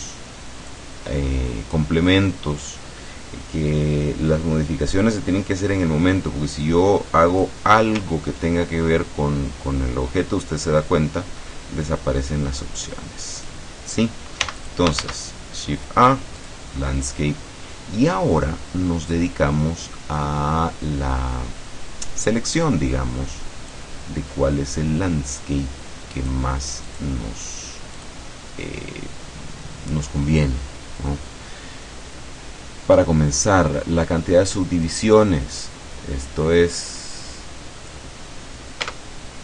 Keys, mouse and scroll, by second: 0.8-2.0 drag, 2.2-2.6 scroll up 2, 6.7-7.7 drag, 12.3-13.8 drag, 14.5 x, 14.7 shift+click, 15.1 shift+a, 16.4 click, 18.6-20.0 scroll down 2, 20.0-20.4 scroll up 2, 21.0 scroll up 2, 21.5-22.0 scroll up 2, 23.8-26.5 drag, 26.9 click, 28.0 click, 32.2-32.8 scroll down 2, 33.6-34.9 scroll down 1, 34.9-38.2 drag, 38.9 Tab.